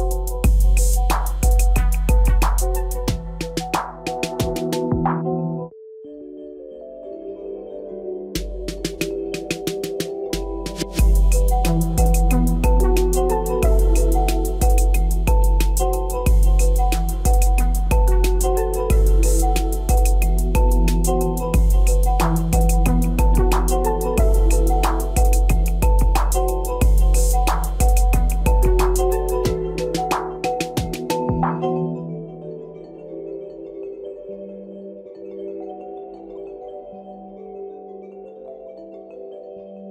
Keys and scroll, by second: 35.8 ctrl+z.